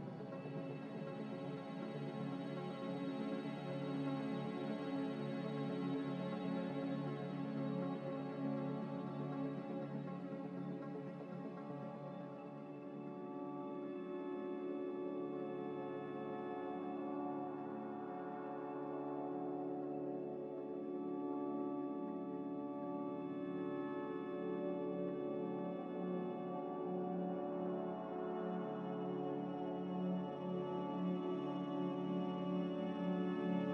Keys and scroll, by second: 0.0-0.9 typing, 6.0-6.8 typing.